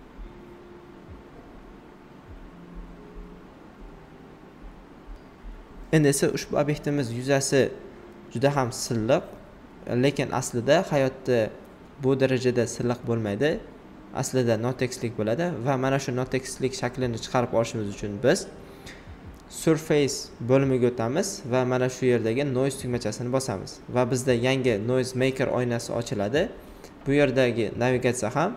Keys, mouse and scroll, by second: 0.0 space, 0.2 click, 0.2 click, 0.8-2.2 shift+drag, 2.2-4.6 right drag, 3.8 typing, 5.6 alt+right click, 10.6 alt+right click, 10.6 typing, 10.8-14.2 alt+right drag, 14.9-21.8 drag, 14.9 typing, 16.0 typing, 21.8-23.7 alt+drag, 23.7-28.5 alt+drag.